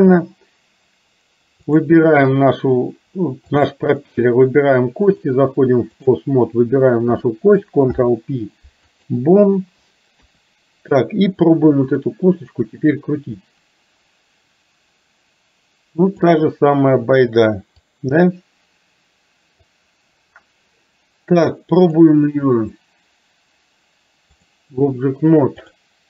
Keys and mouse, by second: 1.8 click, 5.3 click, 7.9 ctrl+p, 10.3 KP_1, 13.5-16.4 drag, 17.9-19.7 drag, 21.9-24.5 drag, 25.6 click.